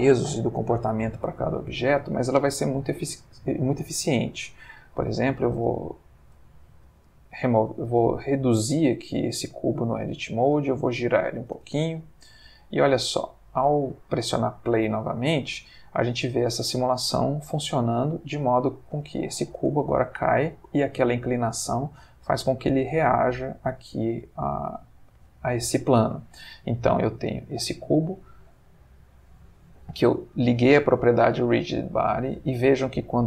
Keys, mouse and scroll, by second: 3.1-4.1 middle drag, 4.3 middle click, 5.3 s, 6.9 Escape, 7.6 Tab, 7.9 s, 8.9 click, 9.1 Tab, 9.6 ctrl+middle click, 10.6 r, 11.4 click, 11.6 space, 18.9 Escape, 19.6 space, 21.6-22.5 middle drag, 23.1-24.1 middle drag, 25.8 Escape.